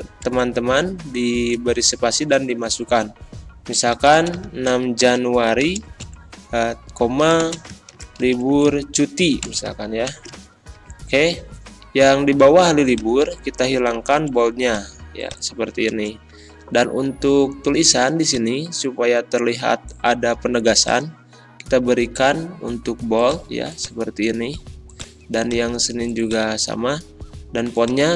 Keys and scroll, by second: 0.2 BackSpace, 0.7 space, 3.9-6.0 typing, 7.2-10.8 typing, 14.1 ctrl+b, 15.9 BackSpace.